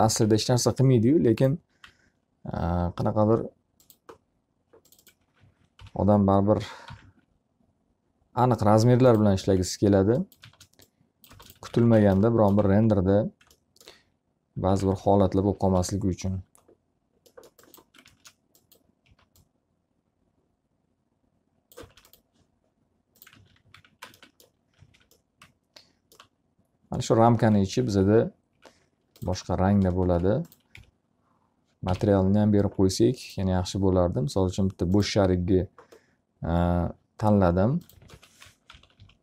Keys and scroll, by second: 0.9 ctrl+z, 2.5 z, 6.5-8.2 typing, 11.1 space, 12.3 x, 12.5 z, 12.7 alt+a, 13.3 z, 15.2-16.5 typing, 18.8 space, 19.7 s, 22.5 space, 24.1 alt+a, 24.3 x, 24.6 z, 24.8 alt+a, 25.7 F3, 32.6 m.